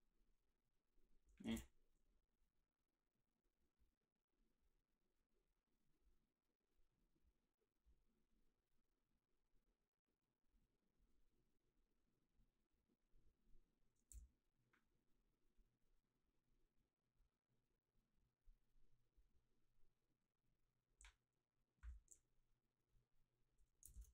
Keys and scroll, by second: 1.5 ctrl+b, 14.1 f.